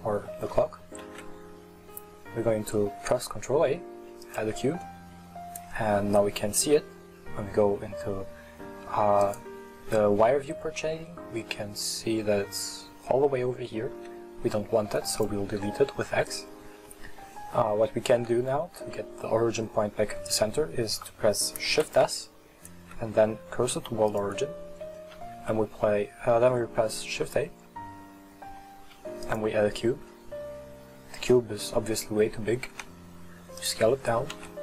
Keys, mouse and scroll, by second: 0.5-1.1 shift+middle drag, 1.1 shift+a, 9.3 click, 10.6-12.2 scroll down 15, 12.2-14.0 scroll down 5, 14.0 x, 15.6-19.1 scroll up 15, 19.1-21.0 scroll up 2, 21.0-21.9 scroll up 1, 21.9 shift+s, 25.2 shift+a, 30.5 scroll up 2, 30.9-32.8 scroll down 14, 32.8 s, 33.9-34.4 scroll up 5, 34.4 s.